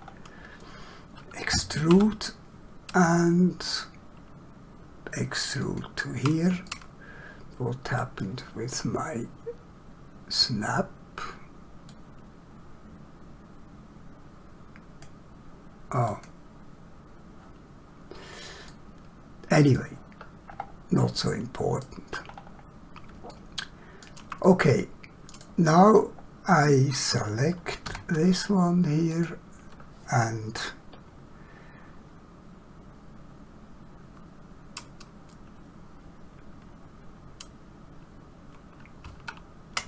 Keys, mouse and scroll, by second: 2.0 e, 5.7 ctrl+click, 6.7 middle click, 12.0 click, 16.2 click, 18.7 click, 18.8 middle click, 20.5 scroll up 1, 21.3 shift+middle click, 22.3 scroll up 1, 23.3 shift+middle click, 24.4 middle click, 25.9 scroll down 1, 27.9 3, 29.1 click.